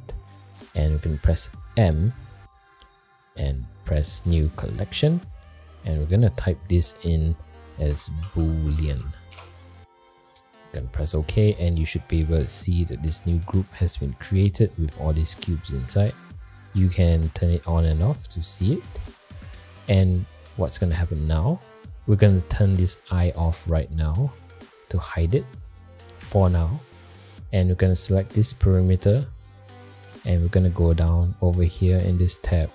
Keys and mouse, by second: 1.7 m, 8.3 o, 13.4 click, 14.5 click, 17.6 click, 18.1 click, 18.6 click, 18.9 click, 20.6 click, 24.3 click, 31.6 click.